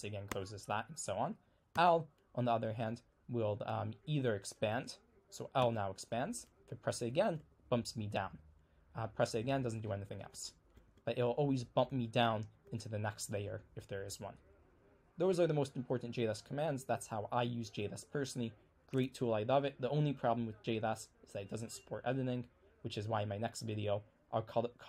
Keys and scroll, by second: 1.8 l, 5.6 l, 9.4-11.9 typing.